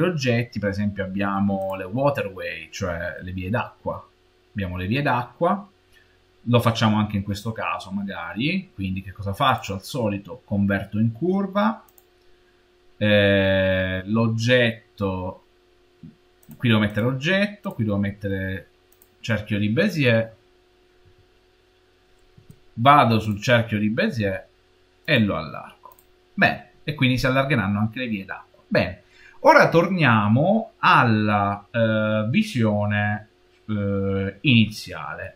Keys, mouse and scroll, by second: 1.5 click, 2.3 scroll down 3, 3.0-6.0 middle drag, 7.5-9.3 scroll up 2, 9.3-12.3 drag, 13.4-15.3 scroll down 3, 15.3-16.3 scroll down 2, 16.3 click, 16.7 click, 20.9 s, 23.1 click, 24.2 s, 25.8 click, 29.0-30.1 scroll down 4, 29.3-33.1 middle drag.